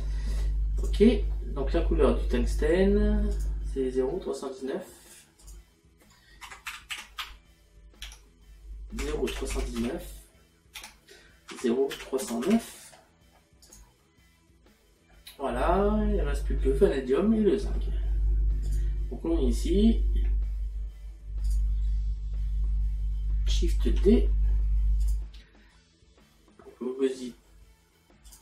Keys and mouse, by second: 0.8 click, 3.4 click, 5.4 click, 8.1 KP_9, 13.7 click, 17.4 middle click, 18.7 click, 21.5 click, 28.3 click.